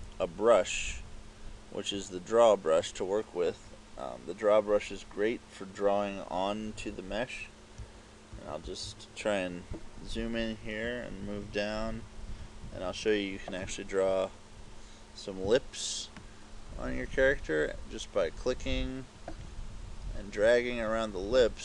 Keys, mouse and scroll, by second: 7.8 KP_Add, 8.4 KP_Add, 8.8 KP_Add, 11.3 ctrl+KP_2, 11.5 ctrl+KP_2, 12.0 ctrl+KP_2, 12.4 ctrl+KP_2, 12.7 ctrl+KP_2, 16.4 click.